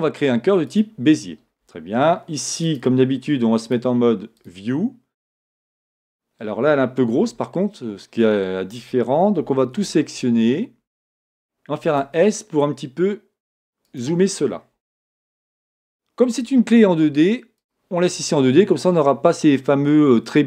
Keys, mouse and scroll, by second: 0.9 shift+a, 4.5-14.9 drag, 7.2 Tab, 7.7 scroll up 1, 9.8 a, 14.9-17.6 shift+middle drag, 17.6-20.4 drag.